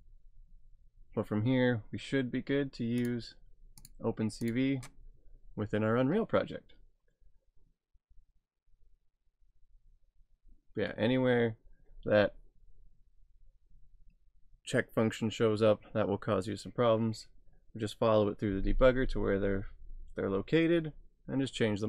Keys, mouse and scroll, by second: 3.0 click, 7.4-7.9 scroll down 1.